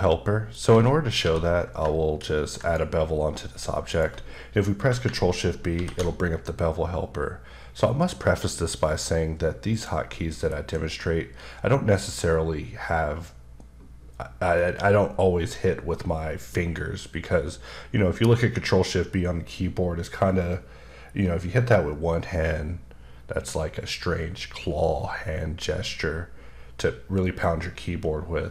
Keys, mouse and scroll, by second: 0.7-1.2 scroll down 1, 1.2 q, 2.6 click, 3.4-3.9 scroll up 3, 3.9 click, 5.7 ctrl+shift+b, 9.7 click, 10.5 shift+b.